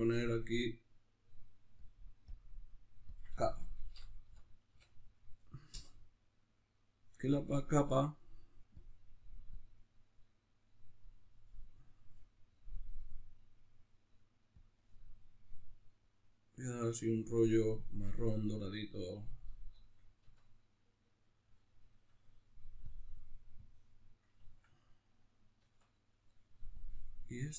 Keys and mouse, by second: 0.0-11.0 drag, 5.8 Return, 19.1-22.9 middle drag, 20.4 Tab, 22.9-24.2 drag, 24.2-26.8 ctrl+middle drag, 25.8 Tab, 26.8 click.